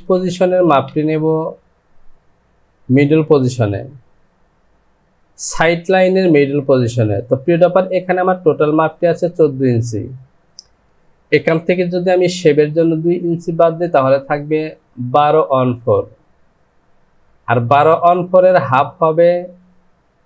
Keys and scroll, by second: 0.1 space, 0.6 space.